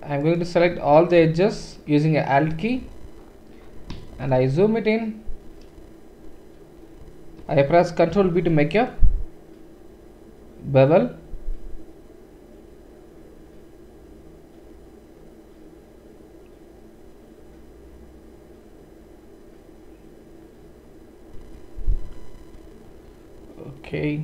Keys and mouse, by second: 0.2 alt+shift+click, 0.7-5.4 ctrl+middle drag, 1.4 shift+z, 4.3 shift+z, 8.2 ctrl+b.